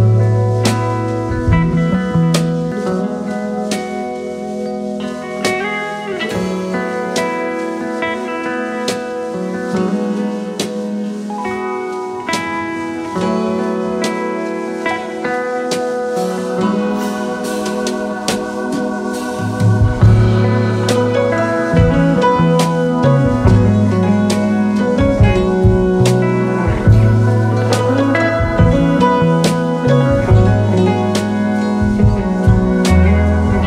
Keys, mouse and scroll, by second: 0.8 shift+click, 3.0 shift+click, 3.0 shift+Right, 4.9-5.5 space, 7.3 right click, 8.7 alt+scroll down 1, 9.8 shift+click, 11.2 ctrl+z, 12.3 alt+click, 14.8 space, 15.3 space, 15.4 space, 16.6 Up, 18.3-18.6 alt+scroll down 2, 18.6-20.0 space, 25.9 alt+scroll down 1, 26.3 space, 31.4 ctrl+z, 32.9 alt+scroll up 1, 33.3 space.